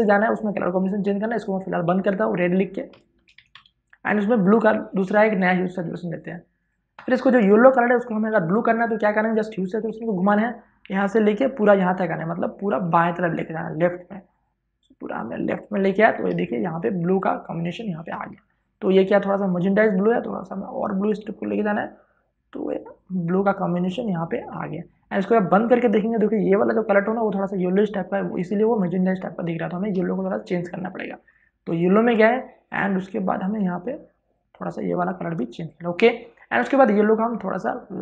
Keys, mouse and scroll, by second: 2.7-3.8 typing, 3.7 click, 12.8-16.2 drag, 16.2 space, 16.5 ctrl+click, 19.4-25.3 drag, 29.3-38.0 drag.